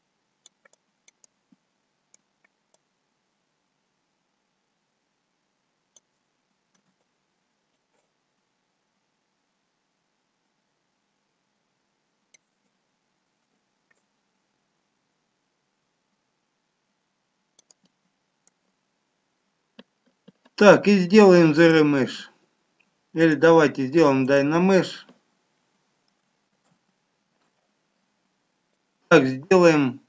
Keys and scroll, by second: 26.8 ctrl+z.